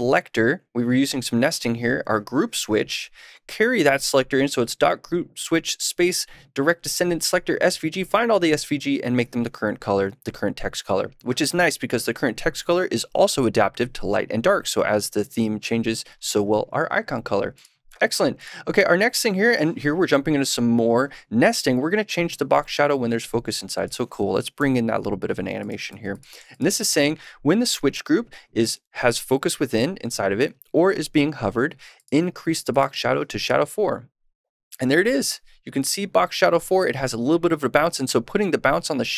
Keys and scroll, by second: 24.5 super+/, 25.8 super+s.